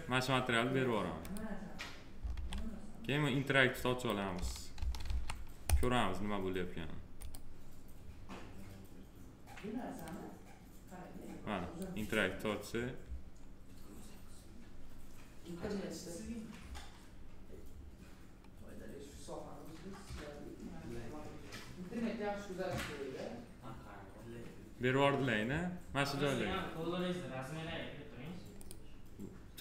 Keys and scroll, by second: 2.3 alt+w, 4.7 ctrl+s.